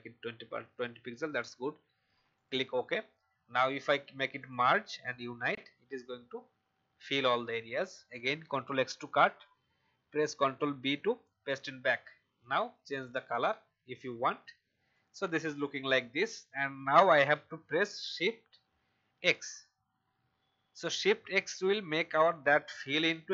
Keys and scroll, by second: 8.4 ctrl+x, 10.4 ctrl+b, 19.1 shift+x.